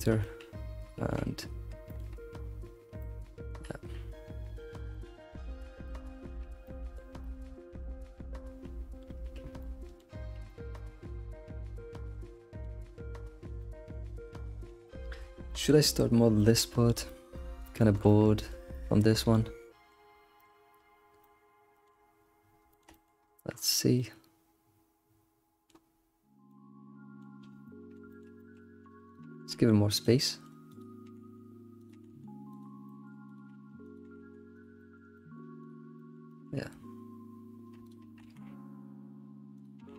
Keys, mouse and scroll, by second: 0.6 middle click, 1.0 ctrl+s, 1.3 scroll down 2, 1.9 alt+middle click, 2.7 scroll down 3, 3.0-5.1 shift+middle drag, 5.4-6.2 scroll up 9, 6.6-9.8 shift+middle drag, 10.3 scroll down 3, 10.5-12.7 shift+middle drag, 12.7-13.1 scroll up 1, 13.1-13.6 scroll down 5, 13.6-15.2 shift+middle drag, 15.2-16.4 scroll up 6, 15.5 shift+middle click, 16.4-19.7 shift+middle drag, 21.0 scroll, 21.2-21.9 middle drag, 21.9-22.7 scroll down 10, 22.7 middle click, 22.9-23.2 middle drag, 23.2-24.0 scroll up 10, 24.0-25.9 middle drag, 25.9-26.5 scroll down 3, 26.5 middle click, 27.4 scroll, 27.6 middle click, 28.6-29.1 scroll up 2, 29.1 click, 29.2 g, 30.2 middle click, 30.7 click, 31.0 g, 31.9 g, 32.9 middle click, 33.3 click, 33.4 g, 34.0 g, 34.8 shift+middle click, 35.6 click, 35.8 scroll down 1, 36.0-37.8 middle drag, 37.8 shift+click, 38.1 g, 39.8 g.